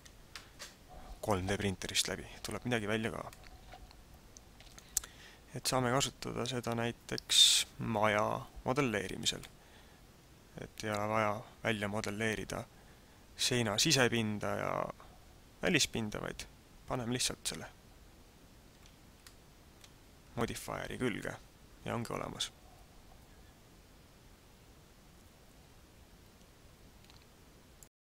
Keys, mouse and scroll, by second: 3.3 middle click, 9.4 middle click, 19.2 middle click.